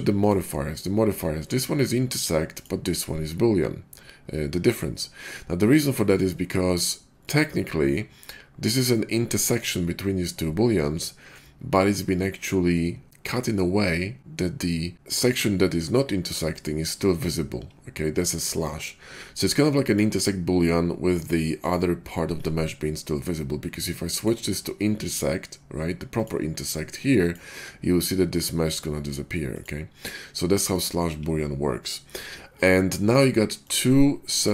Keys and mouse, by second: 0.1 click, 0.2-2.4 middle drag, 2.4 click, 2.6-7.1 middle drag, 7.1 click, 7.2-16.4 middle drag, 16.6-21.5 middle drag, 21.6-24.0 middle drag, 24.1 middle click, 24.6-27.1 drag, 27.3-28.2 drag, 28.4-29.4 drag, 29.6-30.6 drag, 30.7-33.0 drag, 33.0-34.3 middle drag, 34.4-34.5 middle drag.